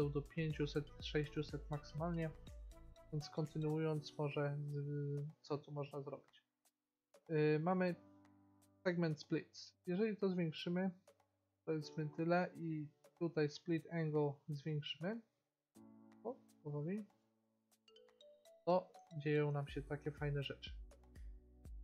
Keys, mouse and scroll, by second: 1.3 middle click, 5.4 middle click, 9.9-12.1 drag, 14.5 click, 17.9 middle click, 21.7-21.8 drag.